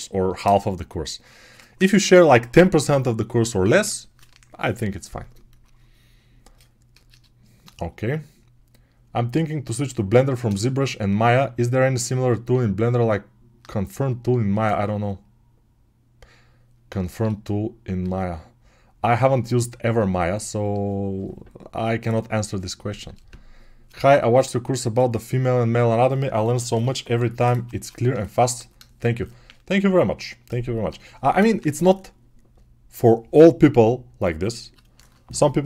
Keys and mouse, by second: 13.7-35.6 drag.